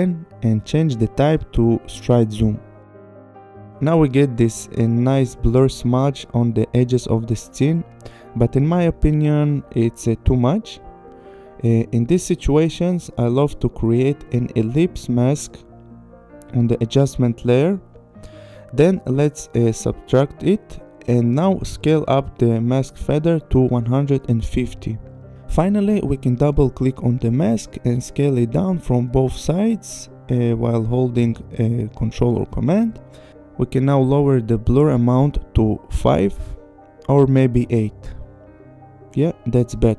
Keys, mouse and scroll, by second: 0.0 click, 0.2 KP_1, 0.2 KP_0, 0.3 Return, 2.3 click, 3.1 click, 11.1 click, 11.8 click, 13.9 click, 15.6 click, 18.8 click, 21.8 click, 23.1 click, 23.5 KP_1, 23.7 5, 23.9 Return, 26.7 click, 27.8 click, 30.8 click, 34.2 click, 34.7 5, 34.9 Return, 36.0 click, 36.2 8, 36.4 Return, 37.5 click, 39.0 click.